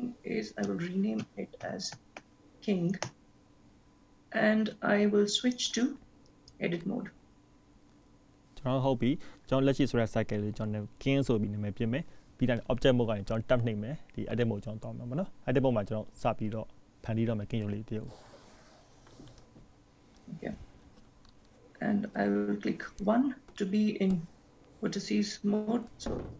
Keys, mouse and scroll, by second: 5.9 click.